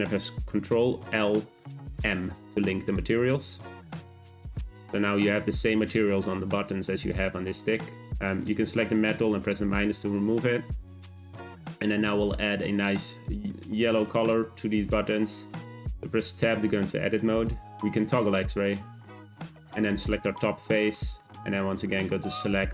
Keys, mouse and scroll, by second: 0.8 ctrl+l, 2.8 click, 3.9 click, 8.1 click, 9.4-11.5 drag, 11.5-12.0 scroll up 2, 13.5-14.4 shift+middle drag, 14.4 scroll up 1, 15.7 Tab, 17.2 z, 19.5 click, 21.6-22.7 drag.